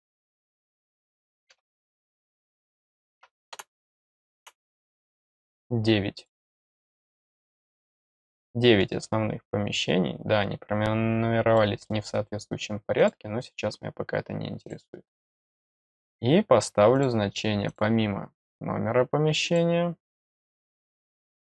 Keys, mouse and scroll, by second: 0.3 click, 1.9 click, 2.3 click, 5.3-5.6 scroll up 2, 6.1 click, 6.6 click, 6.7 click, 7.8 click, 8.3 middle click, 11.5 middle click, 12.9 click, 14.6 click, 16.9 click, 17.6 click, 19.4 click.